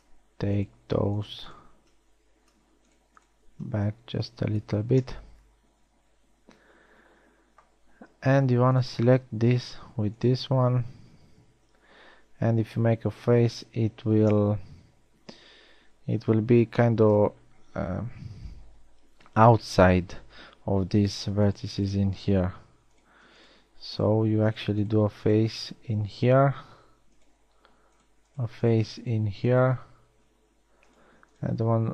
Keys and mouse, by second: 5.6 a, 12.4 f, 27.1 f, 30.7 f.